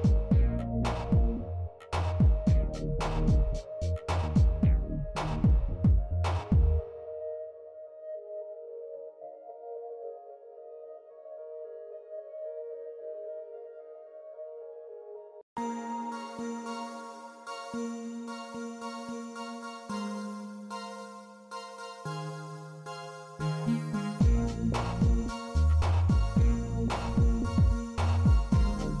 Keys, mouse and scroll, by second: 1.8-2.2 shift+middle drag, 4.9 middle click, 5.8 Tab, 7.1 middle click, 7.5 shift+middle click, 8.4 ctrl+r, 12.5 shift+middle click, 13.2 ctrl+r, 16.7 middle click, 18.1 shift+middle click, 19.0 shift+middle click, 20.2 ctrl+r, 22.2 shift+click, 22.5 middle click, 27.3-28.5 drag.